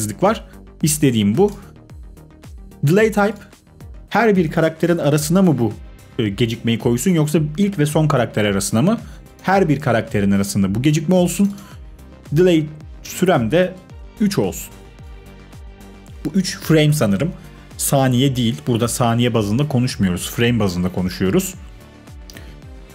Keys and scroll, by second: 13.8 3, 13.9 Return, 16.7 typing.